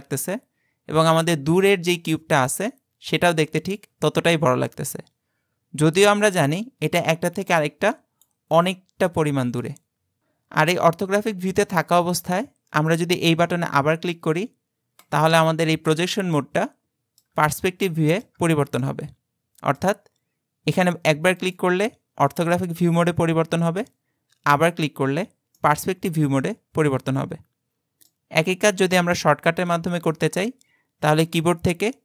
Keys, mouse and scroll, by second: 15.0 click, 15.8-16.7 scroll down 3, 16.7-21.4 middle drag, 21.4 click, 22.6-24.8 middle drag, 24.8 click, 25.6-28.7 middle drag.